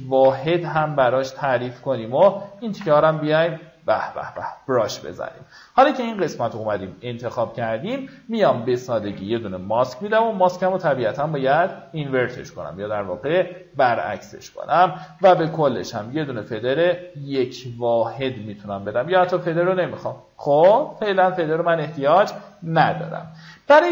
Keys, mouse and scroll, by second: 0.6 b, 1.2 alt+right click, 1.6-2.9 drag, 3.1 ctrl+d, 4.6 q, 7.1 click, 11.7 click, 15.6 KP_1, 18.1 click, 21.0 v, 21.6-22.0 alt+scroll down 1, 22.9 alt+scroll up 1.